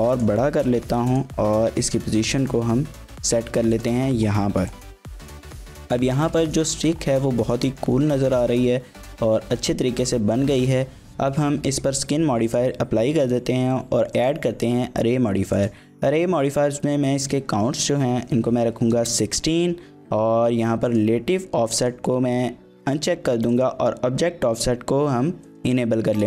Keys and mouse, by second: 0.1 click, 0.6 shift+click, 0.7 z, 1.4 g, 3.7 click, 4.7 shift+click, 5.0 middle click, 5.3 z, 5.9 Tab, 6.5 shift+middle click, 6.7 middle click, 7.4 shift+middle click, 7.6 middle drag, 8.2 shift+middle click, 8.5 middle drag, 11.8 ctrl+a, 12.5-14.3 drag, 15.5-19.7 drag, 20.9 click, 21.8 click, 23.5 click, 25.5 click.